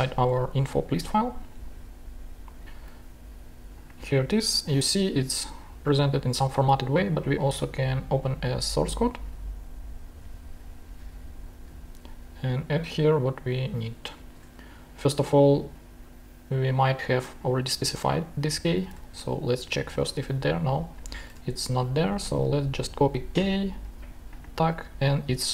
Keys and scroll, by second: 0.9 shift+super+Tab, 14.3 shift+super+Tab, 18.6 shift+super+c, 18.9 shift+super+Tab, 19.3 shift+super+f, 19.5 shift+super+v, 19.7 shift+super+g, 21.3 shift+super+Tab.